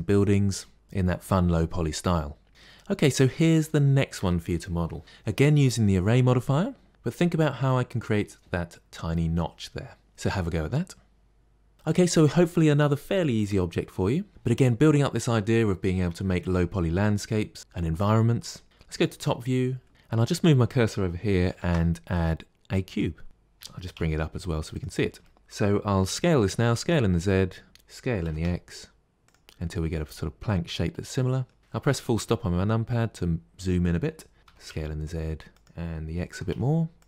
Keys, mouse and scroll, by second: 2.5 shift+middle click, 2.5-2.9 scroll down 1, 2.9-5.0 middle drag, 18.8 KP_7, 20.0-21.4 shift+right drag, 21.4 shift+a, 23.2 middle click, 23.4 g, 25.1-26.3 shift+middle drag, 26.3 s, 28.1 s, 29.4-30.2 middle drag, 30.2-30.9 scroll up 3, 30.9-31.7 middle drag, 31.7 KP_Decimal, 32.8-34.4 middle drag, 34.4 s, 36.2 s.